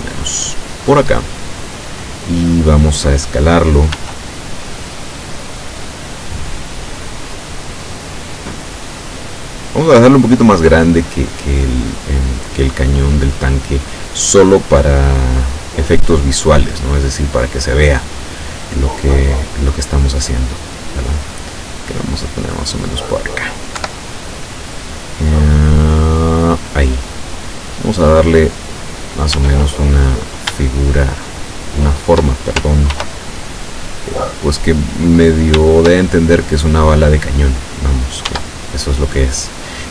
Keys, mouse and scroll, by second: 4.0 s, 9.5 click, 10.5 click, 11.6-13.2 drag, 13.9-16.1 drag, 18.8-20.6 middle drag, 21.1-22.8 drag, 22.9 middle click, 23.8 KP_7, 25.8-26.8 drag, 27.8-29.0 drag, 29.4 Tab, 29.8-30.5 scroll up 2, 30.9-32.4 shift+middle drag, 33.0 ctrl+r, 33.9 click, 35.3 right click, 35.7 shift+right click, 36.4-37.8 shift+drag, 38.3 Tab.